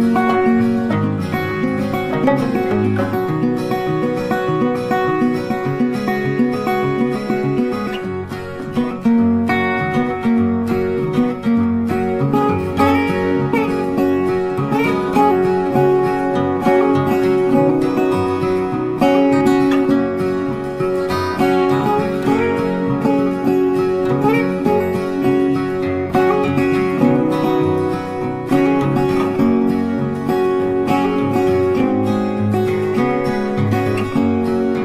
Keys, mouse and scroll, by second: 1.0 shift+click, 3.9 ctrl+click, 6.0 double click, 6.8 ctrl+click, 7.8 ctrl+shift+click, 11.6-12.2 scroll down 1, 12.7 ctrl+click, 14.2 double click, 16.4 ctrl+click, 19.8 double click, 20.9 double click, 22.5 ctrl+g, 23.2 double click, 25.8 shift+click, 28.8 Right, 29.8 typing, 31.2 shift+click, 34.1 double click, 34.2 space, 34.3 double click, 34.5 space, 34.6 ctrl+click.